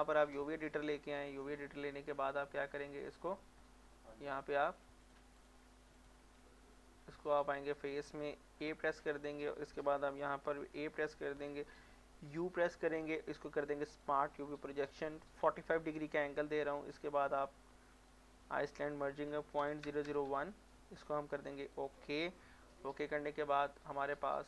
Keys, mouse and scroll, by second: 2.7-3.3 middle drag, 4.4 click.